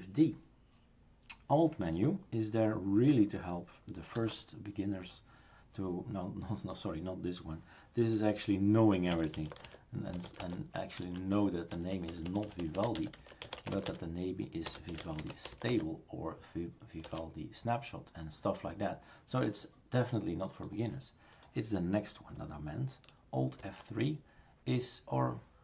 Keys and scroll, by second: 4.2 alt+F2, 9.0 typing, 17.1 Return, 23.6 alt+F3.